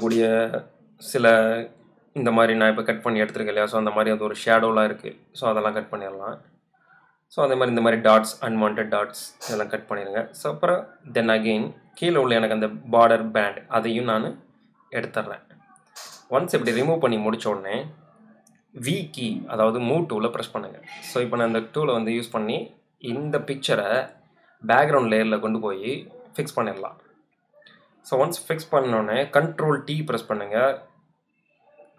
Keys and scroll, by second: 6.4 space, 8.9 space, 17.5 v, 27.6 super+t.